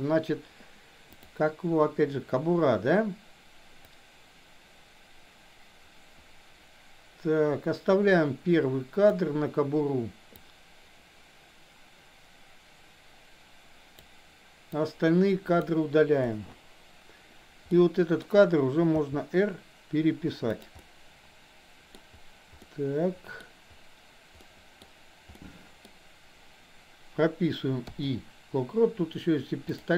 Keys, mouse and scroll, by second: 1.1 click, 3.8-9.2 drag, 10.3-14.1 drag, 14.7-15.7 drag, 16.2 Delete, 17.7-18.2 middle drag, 19.0 r, 20.8-22.0 middle drag, 22.6-23.5 middle drag, 24.5 middle click, 25.5 middle click, 25.8-28.0 scroll down 1, 28.0 i.